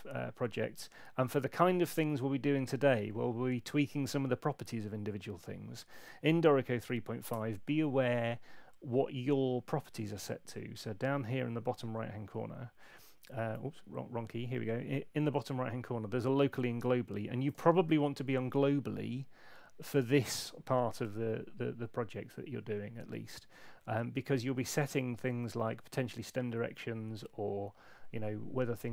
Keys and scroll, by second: 6.8 super+8, 12.7 F5.